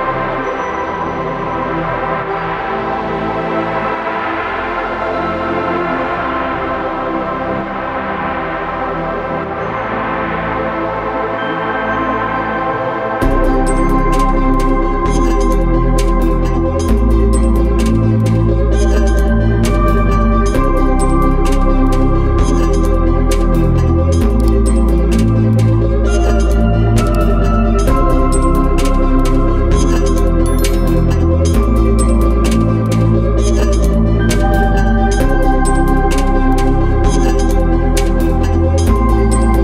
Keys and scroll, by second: 36.6 ctrl+alt+z.